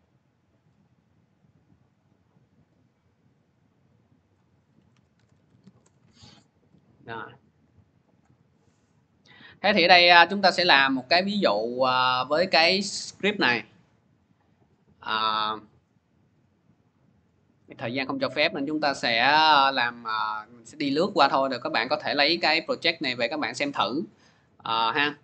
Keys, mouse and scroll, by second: 1.7 click, 2.5 click, 3.1 click, 4.2 click, 4.7-5.9 typing, 6.8 click, 8.1 click, 8.5 Delete, 8.8-9.5 typing, 10.2 click, 10.9 click, 13.5 click, 14.1 click, 14.3 click, 17.7 click, 17.9 click, 20.8 click, 22.8 alt+Tab, 23.5 alt+Tab.